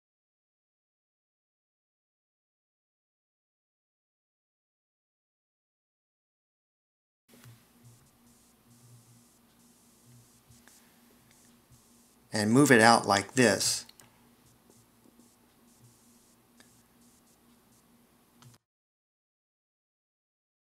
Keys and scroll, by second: 9.3 c, 12.0 0.